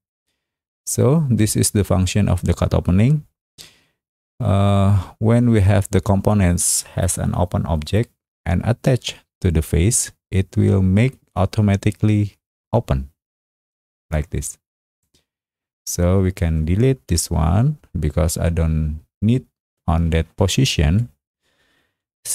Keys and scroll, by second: 17.0 Delete.